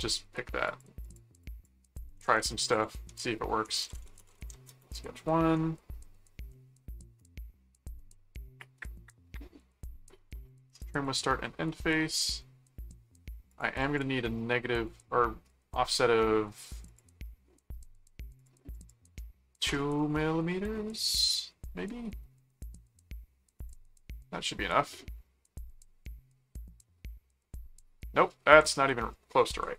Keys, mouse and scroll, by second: 0.6 click, 1.9-5.1 typing, 6.5 middle click, 7.2 middle click, 10.4 click, 11.0 click, 13.5 click, 16.9 click, 18.4 click, 21.0 click, 23.6 click, 26.8-28.2 middle drag, 29.0 middle click.